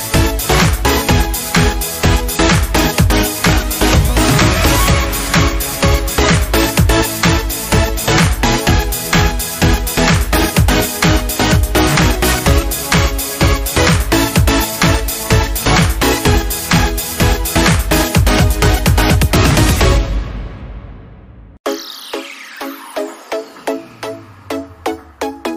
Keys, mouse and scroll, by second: 2.3 click, 6.6 click, 8.4 Down, 12.4 Down, 13.8 click, 14.1 Down, 15.2-18.4 drag, 18.2 z, 20.3 ctrl+z, 22.0-25.5 drag.